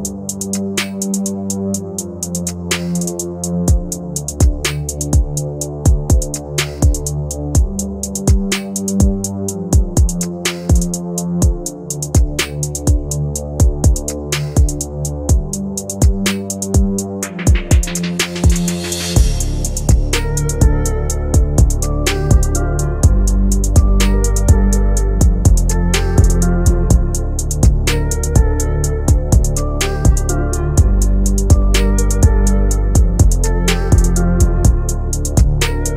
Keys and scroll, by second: 12.7 shift+F2.